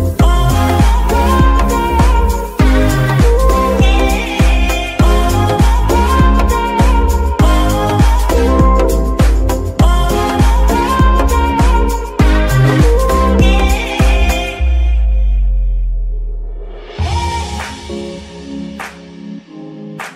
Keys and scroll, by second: 2.0 ctrl+Tab, 4.4 g, 14.2 shift+a.